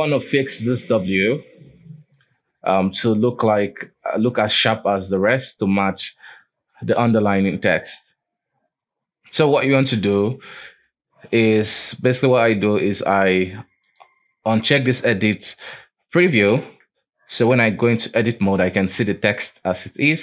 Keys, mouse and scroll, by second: 0.2-1.6 scroll up 2, 1.6-2.0 scroll down 3, 2.0-2.5 shift+middle drag, 2.5-3.8 scroll up 1, 3.8-5.5 scroll up 1, 6.1 click, 6.7 click, 7.1 click, 7.6 click, 8.7-9.1 scroll up 2, 9.7 Tab, 10.1 alt+a, 11.7 Tab, 13.1 click, 14.0 click, 16.8 Tab, 17.4 Tab, 17.8 Tab, 18.3-18.8 scroll down 2, 18.8-19.5 scroll up 4, 19.5 Tab.